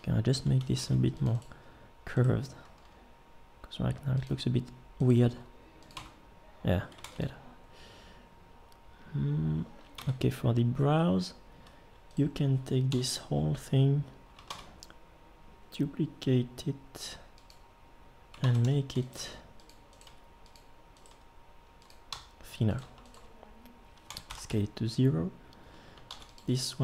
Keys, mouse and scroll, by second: 0.8 ctrl+r, 2.8 g, 5.3 g, 6.0 Tab, 7.0 ctrl+s, 10.0 Tab, 12.9 l, 14.5 shift+d, 18.4 ctrl+Tab, 19.2 g, 20.1 g, 21.1 g, 22.1 a, 24.1 s, 26.1 ctrl+r.